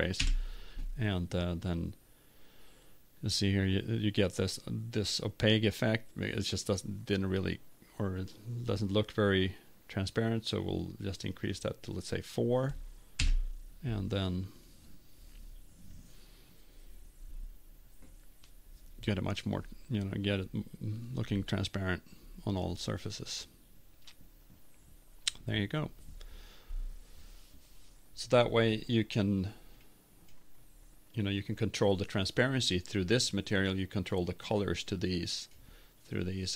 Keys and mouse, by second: 11.9 click, 23.3 click, 31.0 click.